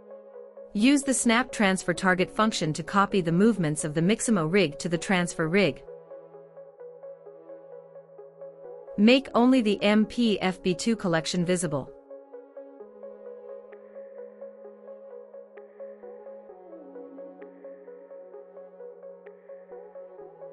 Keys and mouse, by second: 3.0-4.9 drag, 6.6-7.3 drag, 7.9 click, 10.1 click, 11.4 click, 12.3-13.6 drag, 13.6 space, 14.9 space, 15.7-17.0 drag, 19.2 click.